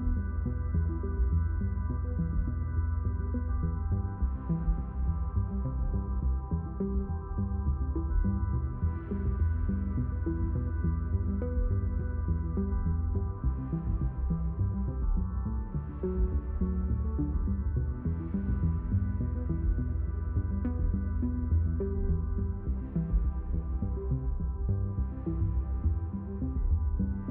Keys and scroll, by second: 0.4 1, 0.8 6, 1.2 Return.